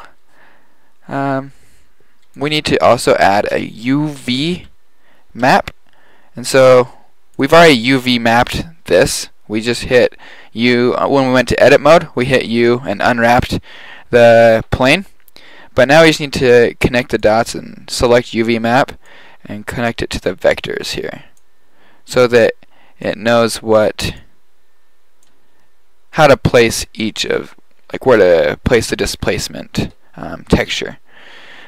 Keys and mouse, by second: 2.4-4.3 drag, 2.7 shift+a, 7.4-8.9 drag, 8.9-9.4 middle drag, 17.3 click, 18.7 click, 19.1 drag, 27.6-28.1 drag.